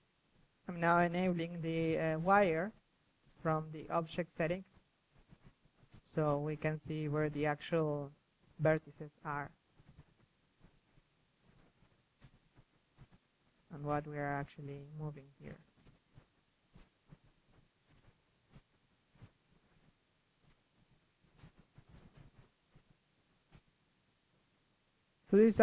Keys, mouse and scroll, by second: 0.2 click, 0.5 middle click, 0.8 KP_3, 1.5-2.7 middle drag, 1.8 KP_3, 2.0 KP_1, 4.1 KP_3, 5.6-6.7 middle drag, 9.4 middle click, 9.5 click, 9.7 middle click, 9.8 click, 9.9 KP_3, 10.7 click, 11.7 click, 12.0-12.5 middle drag, 12.5-13.0 drag, 13.0 middle click, 13.2 click, 13.4 f, 14.8-15.9 middle drag, 15.9 click, 16.0 middle click, 16.3 KP_1, 16.6 click, 17.0-17.4 middle drag, 17.8-19.4 drag, 19.4 middle drag, 19.4 KP_3, 19.5-20.7 drag, 21.4-22.8 drag, 22.8 middle click, 22.8 click, 23.2 middle click, 23.3 KP_3, 23.5-23.9 drag, 23.9 g, 24.0 KP_3, 24.6 f, 24.7 middle click.